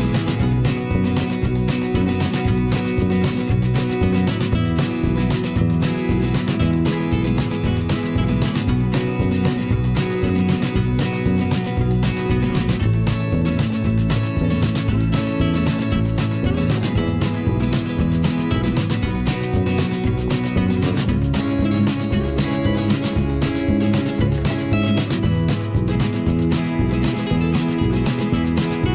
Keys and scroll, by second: 2.7 ctrl+z, 6.5 v, 10.8 b, 20.9 ctrl+z, 21.5 ctrl+z, 26.9 v.